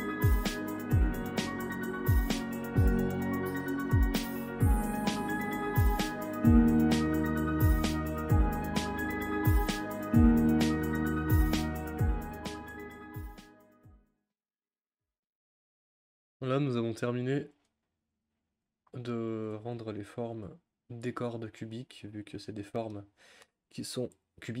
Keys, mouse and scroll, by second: 1.0 click, 1.4 Tab, 1.6 click, 2.0-3.7 typing, 2.4 click, 2.9 click, 3.5 click, 4.8 click, 5.2-8.2 typing, 5.6 click, 6.2 click, 7.1 click, 8.0 click, 8.6 click, 9.4-11.4 typing, 9.4 click, 9.6 click, 10.2 click, 11.1 click, 12.2 Tab, 12.2 click, 12.7-13.9 typing, 12.8 ctrl+z, 13.3 click, 13.5 click, 14.1 click, 14.4 click, 15.3 u, 15.9-16.4 drag, 18.7-19.7 drag, 20.4 g, 22.0-22.6 scroll up 6, 22.6 scroll down 1, 22.9-24.6 middle drag.